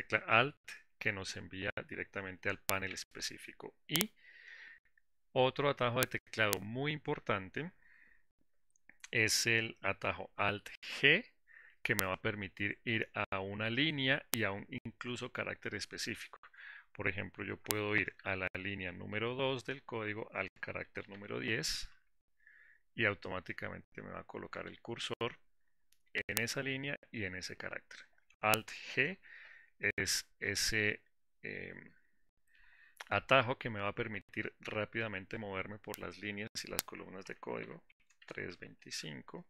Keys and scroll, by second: 11.2 alt+g, 29.1 alt+g.